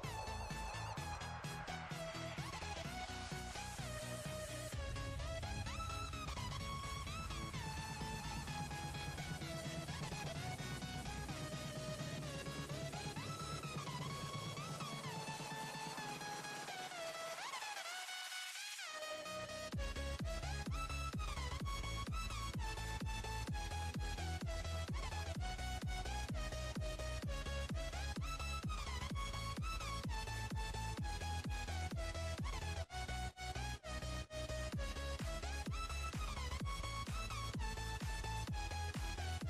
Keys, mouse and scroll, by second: 0.2 b, 1.7 click, 5.3-6.1 scroll down 6, 6.1 click, 7.0 scroll up 3, 8.4-9.8 drag, 10.8 click, 11.9 click, 12.8 click, 13.8 click, 14.8 click, 15.6 Tab, 16.8 click, 17.5 Tab, 18.1 click, 19.3 click, 20.2 click, 21.4 shift+click, 22.3 shift+click, 23.4 click, 25.4-26.4 scroll up 2, 26.4 shift+click, 27.4 click, 30.2 ctrl+b, 34.4 alt+click, 37.6 click, 39.3 ctrl+b.